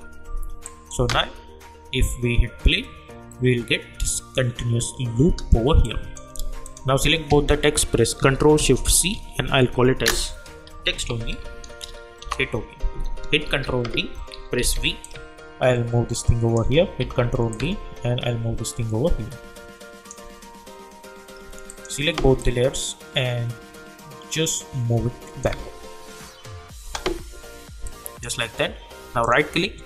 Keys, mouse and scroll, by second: 0.9 space, 5.2 space, 5.8 click, 7.2 ctrl+a, 8.9 ctrl+shift+c, 10.6-11.8 typing, 12.2 Return, 13.4 ctrl+d, 14.7 v, 15.0 click, 15.3-16.5 shift+drag, 17.0 ctrl+d, 17.5 click, 17.8-21.4 shift+drag, 22.7-25.5 drag, 25.5 space, 28.1-28.5 drag, 29.2 right click.